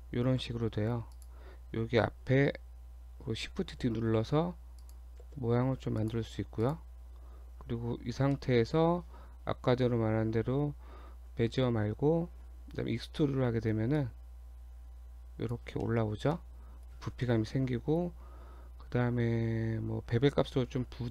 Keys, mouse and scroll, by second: 0.4 g, 3.7 shift+d, 5.3 shift+d, 6.6 click, 7.1 Tab, 7.5 Tab, 7.9 Tab, 8.3 middle click, 8.3-8.9 scroll down 1, 8.9-9.2 scroll up 1, 9.5-10.8 scroll down 7, 11.1 scroll up 2, 12.4-12.8 scroll up 1, 14.0 click, 15.8 middle click, 16.1 scroll up 1, 16.3 middle click, 16.9 scroll up 2, 17.2 middle click.